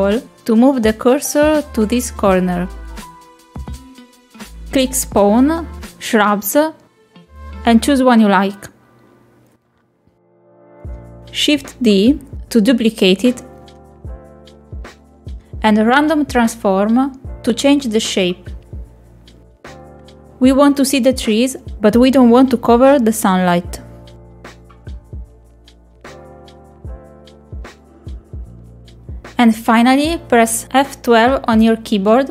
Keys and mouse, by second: 0.5-2.2 shift+right drag, 2.7 shift+right click, 3.0 shift+right click, 4.5 shift+middle click, 5.4-11.1 drag, 11.7 click, 12.9 middle click, 14.9 shift+d, 16.0 click, 18.9 click, 20.0-21.5 drag, 24.1-25.2 drag, 25.4 click, 26.3 click, 26.9-28.4 drag.